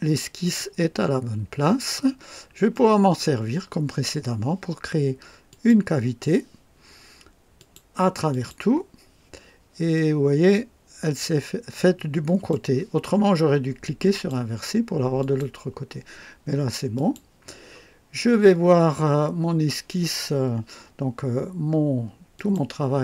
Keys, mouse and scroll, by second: 0.5-2.1 drag, 2.3 scroll down 1, 2.7 right click, 2.7 typing, 5.5 click, 7.5 click, 8.3 click, 9.9-12.7 drag, 14.1 click, 15.2 click, 15.4 typing, 16.9 click, 22.3 click.